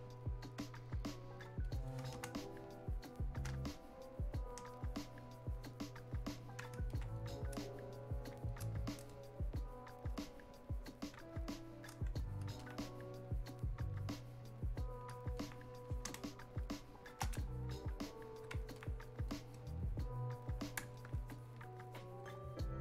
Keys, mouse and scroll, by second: 1.6 click, 2.2 space, 3.9-9.1 drag, 9.1-15.4 drag, 15.4 alt+click, 16.1 space, 17.8 click, 18.1-22.8 shift+drag.